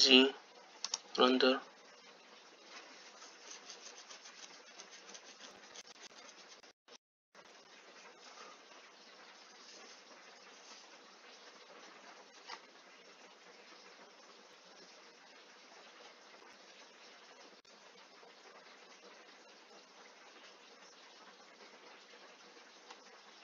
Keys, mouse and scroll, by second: 0.5 z.